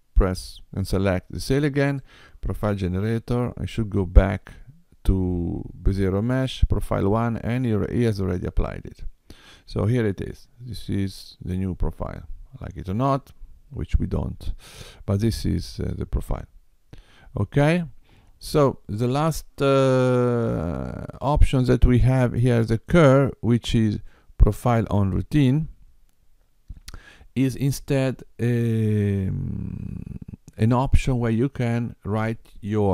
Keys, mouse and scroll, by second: 2.0 click, 8.5 middle click, 23.0 click.